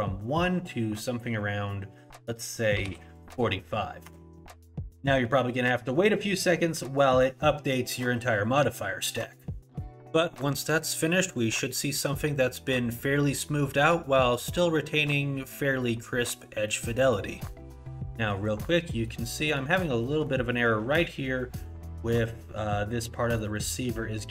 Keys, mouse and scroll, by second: 12.4 middle click, 13.8 middle click, 14.8 middle click, 15.8 middle click, 16.7 middle click, 17.5 middle click, 18.1 middle click, 19.1 middle click, 19.7-22.1 scroll up 8, 20.0 middle click, 23.5 middle click, 24.0-24.3 scroll down 13.